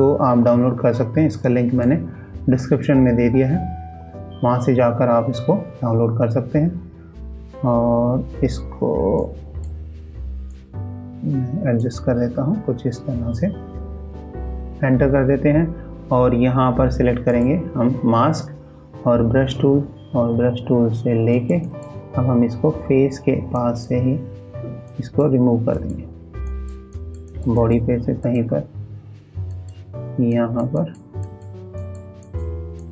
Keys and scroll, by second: 0.3 alt+Tab.